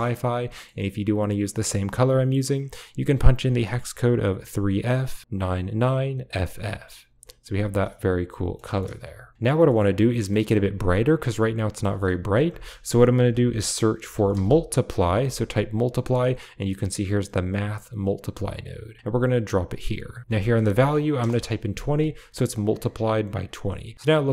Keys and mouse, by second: 0.3 middle click, 1.3 click, 7.1 click, 7.9-8.4 middle drag, 10.3 middle drag, 10.9 middle drag, 11.6 middle click, 12.5 shift+a, 19.6 click, 20.2 click, 23.7 click, 23.9-24.3 typing.